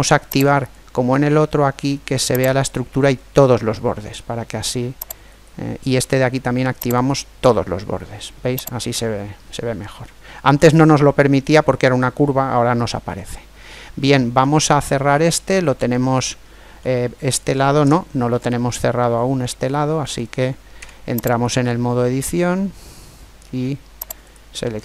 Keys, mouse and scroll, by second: 0.3 click, 2.3 click, 5.1-6.7 right drag, 6.8 click, 8.6 click, 8.6 right click, 9.8-11.7 middle drag, 12.8-17.3 middle drag, 17.7-20.1 middle drag, 20.5 Tab, 21.3 Tab, 24.0-24.8 right drag.